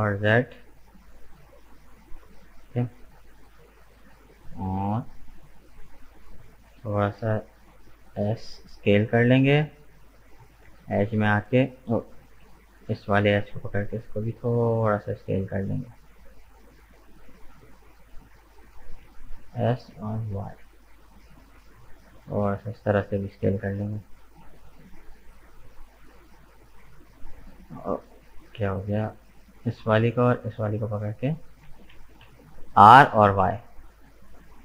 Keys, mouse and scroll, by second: 2.9-6.1 middle drag, 6.7 s, 10.4 click, 11.1 s, 13.2 alt+right click, 13.9 s, 15.9-19.0 middle drag, 19.5 s, 22.6 middle click, 23.5 right click, 23.8-25.2 middle drag, 25.2 click, 25.9-27.0 middle drag, 27.0 alt+right click, 28.3 click, 28.5 right click, 29.4 alt+right click, 30.5 alt+shift+right click, 30.8-31.9 middle drag, 31.9 r.